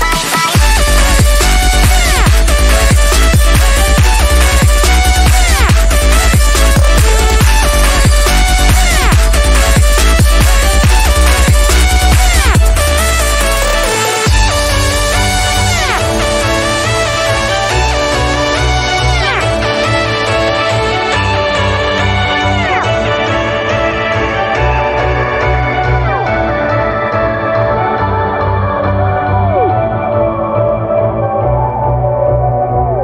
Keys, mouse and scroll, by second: 0.4-3.7 drag, 3.7 z, 4.0 click, 5.5 right click, 5.8 click, 18.3 click, 19.3 right click, 20.1 click, 20.7 space, 20.8 click, 21.0 space, 21.6 click, 22.8-24.2 drag, 25.1 ctrl+z, 26.0-31.0 drag, 31.6 ], 31.8-33.0 drag.